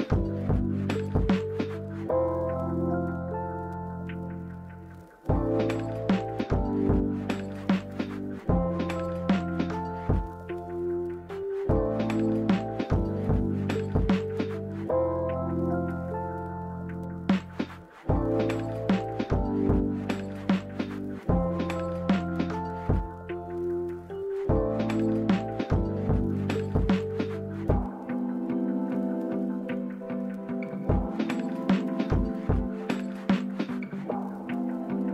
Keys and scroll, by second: 3.6 z, 7.0 typing, 8.8 Escape, 11.1 d, 12.2 typing, 12.5 Return, 13.3 Escape, 23.1-24.8 typing, 33.6-34.1 typing, 34.1 Return.